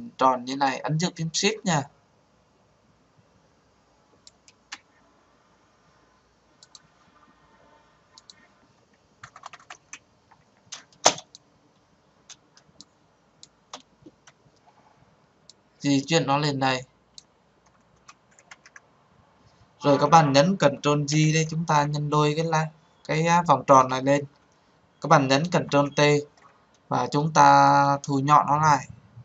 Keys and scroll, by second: 20.7 ctrl+j, 25.6 ctrl+t.